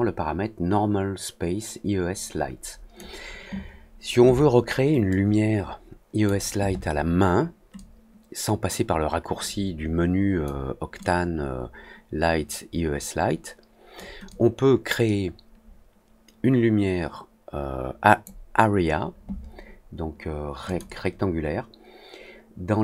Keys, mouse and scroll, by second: 5.0-6.2 drag, 7.7-10.4 drag, 10.9-13.9 drag, 14.2-18.2 drag, 20.6 click.